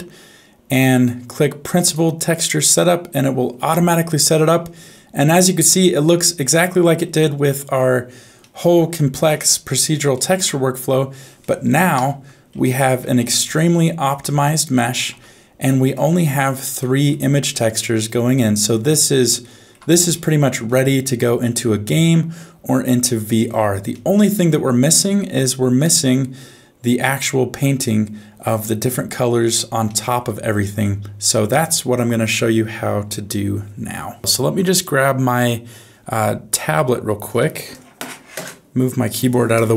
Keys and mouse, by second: 4.1 middle click, 5.6-7.0 middle drag, 8.4 middle click, 10.1 shift+middle click, 11.4 middle click, 11.9 Tab, 13.0 alt+a, 13.5 alt+z, 13.9 middle click, 15.1 Tab, 15.7 middle click, 16.8 middle click, 18.1 middle click, 19.4 shift+middle click, 20.6-22.9 middle drag, 23.9 shift+middle click, 24.4 middle click, 29.9 shift+middle click.